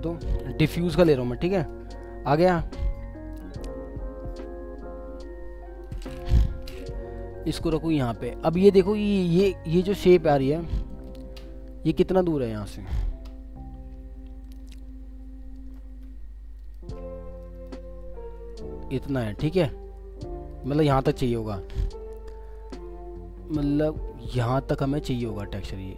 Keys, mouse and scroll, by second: 4.4 alt+click, 6.4 Return, 16.6 shift+click, 17.1 shift+scroll down 1, 17.4 middle click, 18.3-20.0 scroll up 1, 22.7 scroll up 2, 24.0 alt+scroll up 1.